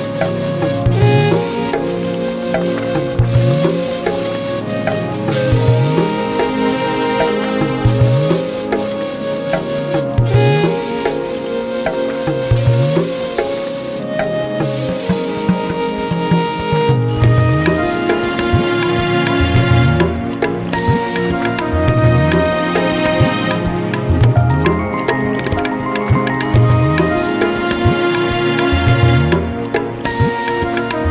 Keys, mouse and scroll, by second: 0.8 click, 1.0 middle click, 1.0-1.4 scroll, 2.1-2.5 alt+scroll, 3.3 alt+middle click, 3.8-4.7 scroll, 4.9 z, 5.9 click, 6.6 shift+click, 9.0 click, 10.0 scroll, 11.6 click, 12.3 shift+click, 12.6 right click, 13.6 click, 14.8 middle click, 14.9 scroll, 15.2 middle click, 16.9 ctrl+z, 18.9-19.5 alt+scroll, 19.7-20.1 scroll, 20.1 ctrl+z, 20.8 middle click, 21.7 alt+middle click, 22.4-23.3 scroll, 23.0 click, 24.2 alt+middle click, 24.7-25.3 scroll, 25.5 middle click, 26.0 a, 26.6 click, 27.6 shift+click, 28.7 q, 29.6 ctrl+j, 30.3 ctrl+k, 30.9 click.